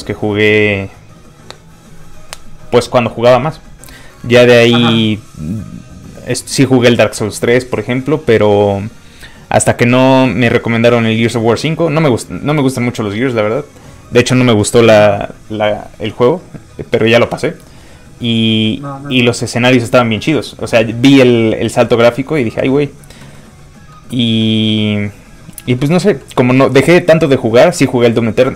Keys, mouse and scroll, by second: 23.4 middle click, 23.5 middle click, 25.6 scroll down 1, 27.9-28.5 shift+scroll up 2.